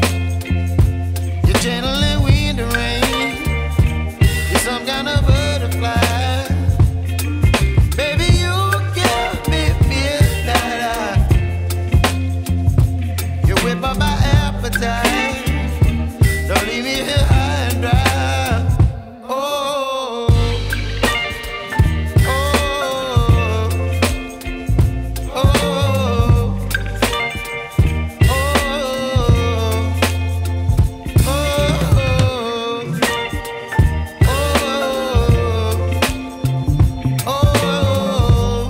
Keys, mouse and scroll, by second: 10.9 ctrl+s, 15.4-18.1 drag, 23.8 click, 28.3 click, 29.3 click, 31.1 ctrl+s, 31.9 click, 33.1-36.7 scroll down 17, 36.7-38.6 drag.